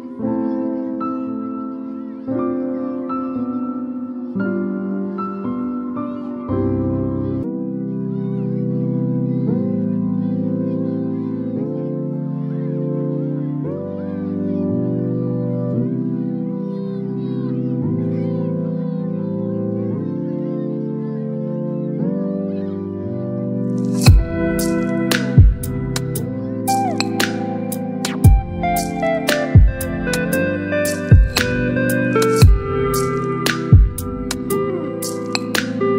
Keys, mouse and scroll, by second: 8.0 BackSpace, 9.0 BackSpace, 11.5 click, 13.5 ctrl+t, 14.7-16.5 drag, 24.8 click, 27.3 i, 28.7-29.5 typing, 30.8 ctrl+a, 32.0 click, 33.6-35.0 typing.